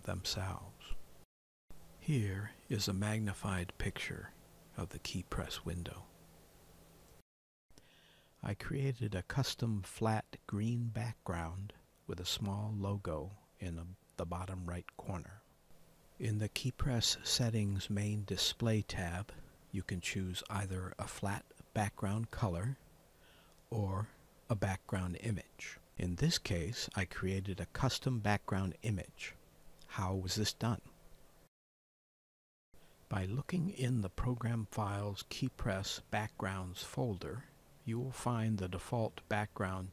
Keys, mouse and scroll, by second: 0.5 click, 1.1 click.